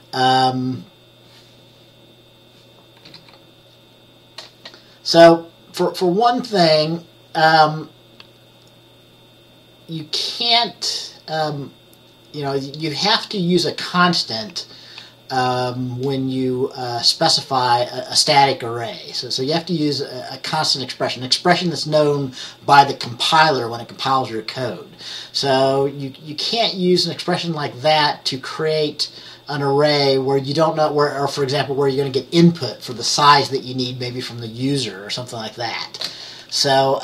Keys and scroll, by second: 3.2 F10.